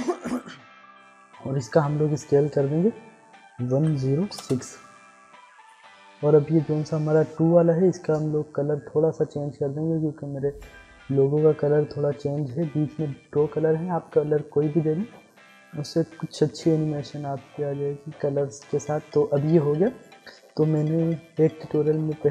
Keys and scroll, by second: 3.2 1, 3.6 0, 4.1 6, 4.3 Return.